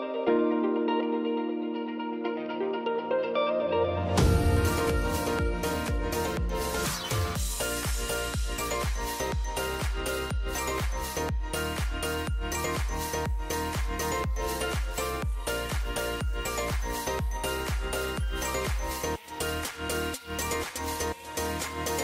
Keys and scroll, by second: 3.6 ].